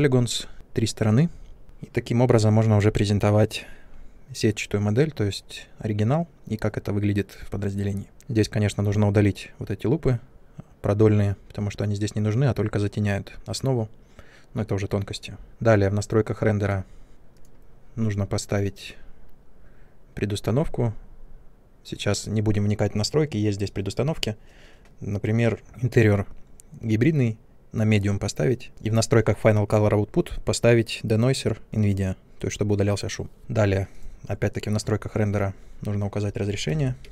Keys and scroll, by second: 36.4 1.